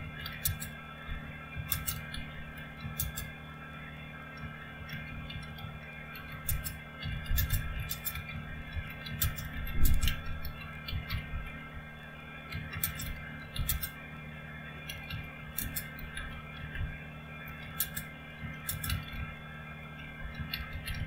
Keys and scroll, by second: 0.0-21.0 typing.